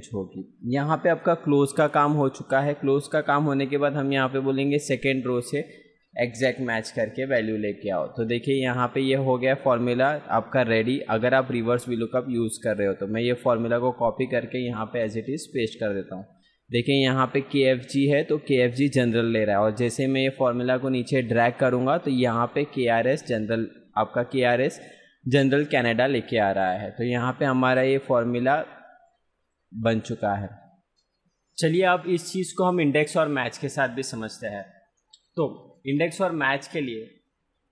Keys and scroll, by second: 8.1 F2, 9.5 ctrl+c, 13.6 F2, 14.3 ctrl+v, 20.1 ctrl+d.